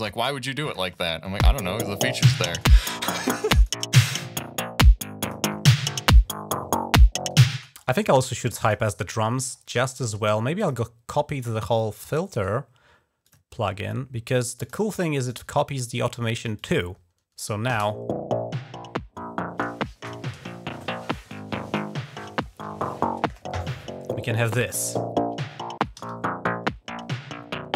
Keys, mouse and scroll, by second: 0.1 click, 0.7 space, 2.4-3.5 drag, 5.1 click, 6.4 scroll up 1, 7.4 space, 7.6 scroll up 1, 8.5 click, 9.4 scroll down 1, 10.4 click, 11.4-11.8 scroll down 1, 12.2 right click, 13.1 click, 13.4 scroll up 2, 14.4 click, 15.1 right click, 16.4 click, 17.5 space, 24.2-25.5 scroll down 5, 25.5 ctrl+scroll up 1, 25.8 g, 26.1 scroll down 1, 26.9 ctrl+scroll down 1, 27.3 ctrl+scroll up 1.